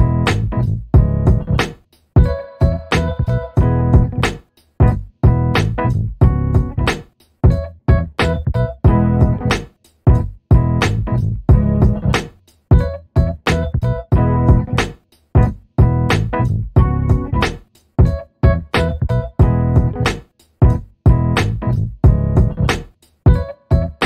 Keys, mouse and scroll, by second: 1.2 alt+middle click, 2.7-3.4 alt+scroll down 2, 3.5 click, 4.2 BackSpace, 5.3-6.1 scroll down 1, 6.3-6.8 scroll up 1, 6.8 middle click, 10.0 click, 11.4 middle click, 13.4-13.9 alt+scroll down 2, 13.9 alt+middle click, 15.0 click, 18.0 alt+middle click, 18.6-19.2 alt+scroll up 2, 19.2 click, 22.1 alt+middle click, 22.8 click.